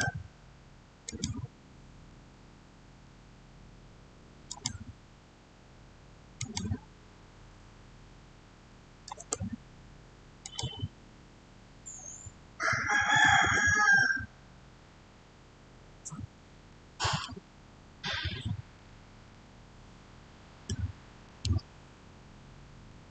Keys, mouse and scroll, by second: 4.3 click, 8.5 6, 9.0 Return, 10.3 click, 12.6 6, 13.2 Return, 14.5-15.0 scroll down 1, 17.1-23.1 shift+middle drag.